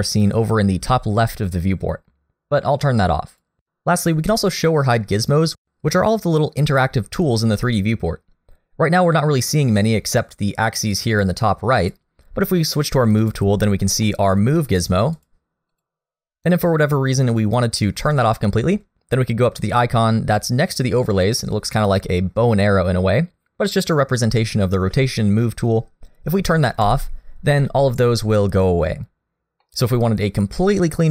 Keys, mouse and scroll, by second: 4.7 click, 11.0 click, 13.2 click, 14.0 middle click, 14.7 click, 15.2 click, 15.7 click, 26.8 click, 27.6 middle click, 29.1-29.6 scroll down 1, 29.6 middle click.